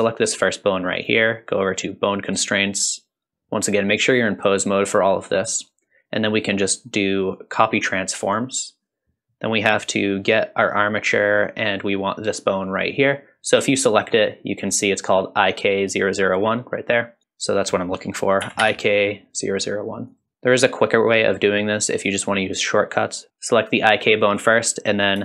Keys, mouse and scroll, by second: 1.0 click, 5.5-8.4 drag, 9.7-10.7 drag, 12.6 click, 17.4-20.2 drag, 23.7 click.